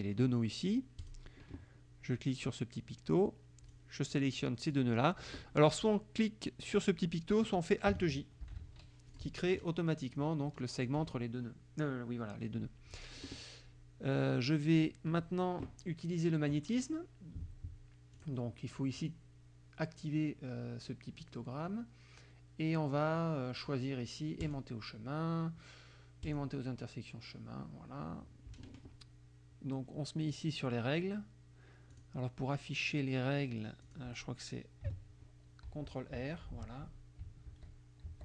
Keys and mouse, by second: 1.0 click, 3.7-4.9 drag, 8.5 alt+j, 9.2 click, 18.2 click, 19.1 click, 24.4 click, 26.3 click, 32.0 click, 33.9 click, 35.7 ctrl+r, 37.5 ctrl+r.